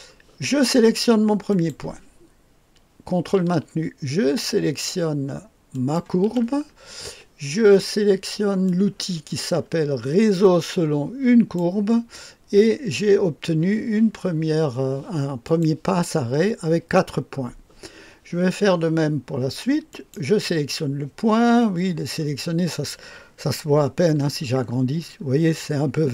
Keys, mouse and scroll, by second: 1.4 click, 5.7 ctrl+click, 8.6-12.4 drag, 15.4 click, 19.8 click.